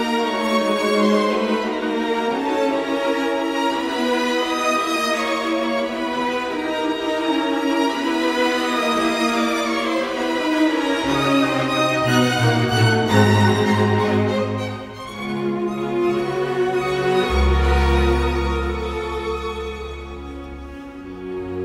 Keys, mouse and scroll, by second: 0.4 shift+space, 3.0 shift+space, 5.0 shift+space, 10.6 f, 10.8 space, 12.1 Escape, 12.8 middle click, 18.8 Escape, 19.3 t, 19.4 space, 21.4 Delete.